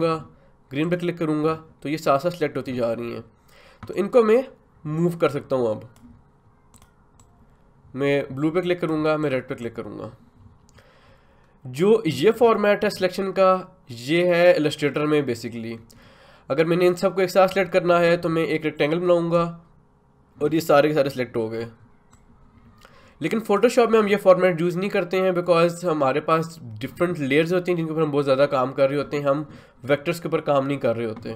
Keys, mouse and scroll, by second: 3.9-17.5 drag, 17.5-22.1 drag, 22.1-31.3 drag.